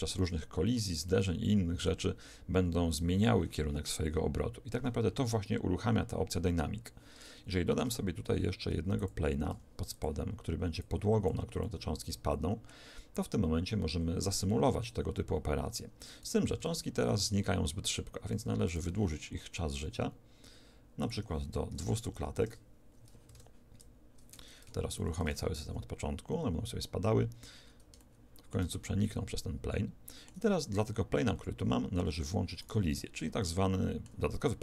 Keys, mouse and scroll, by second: 7.5 shift+a, 9.4 s, 10.7 click, 11.6-16.5 middle drag, 16.5 alt+a, 18.2 Escape, 18.6-20.4 right drag, 19.8 middle click, 21.0 click, 22.0 0, 23.2 alt+a, 24.8 Escape, 24.8 shift+Left, 25.2 alt+a, 27.9-30.8 middle drag, 31.6 Escape, 33.0-34.6 right drag, 33.4-34.6 middle drag.